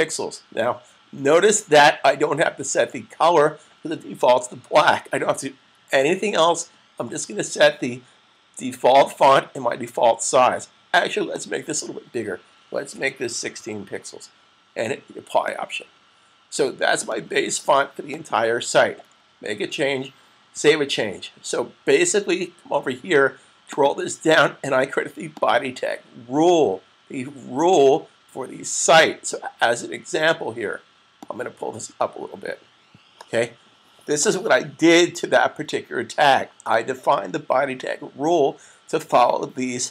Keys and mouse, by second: 11.3 click, 12.7 1, 13.2 6, 15.2 click, 20.4 super+s, 23.5 click, 27.4 click, 31.0 click.